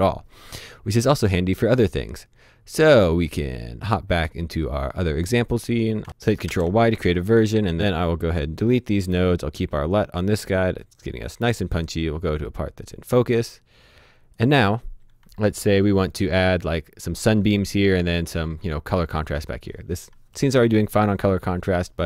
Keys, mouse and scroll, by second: 4.5 click, 6.1 ctrl+b, 6.3 right click, 6.4 click, 6.4 y, 7.1 right click, 7.5 click, 8.7 Delete, 9.9 click.